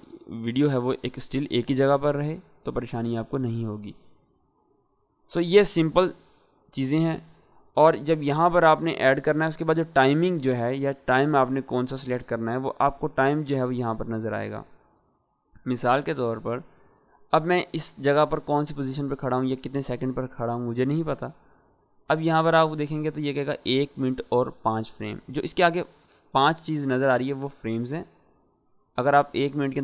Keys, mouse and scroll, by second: 5.0-5.9 drag, 7.8-8.7 drag, 10.4-11.4 drag, 12.3-12.6 click, 16.9-17.8 drag.